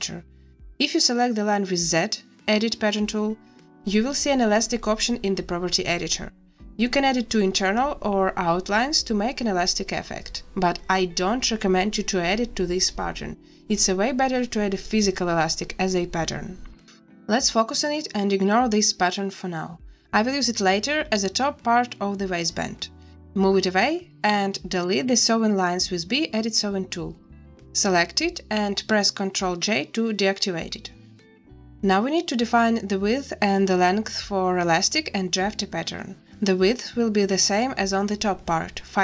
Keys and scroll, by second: 0.6 z, 16.5 a, 23.3 b, 25.3 Delete, 27.6 a, 29.4 ctrl+j, 36.5 z.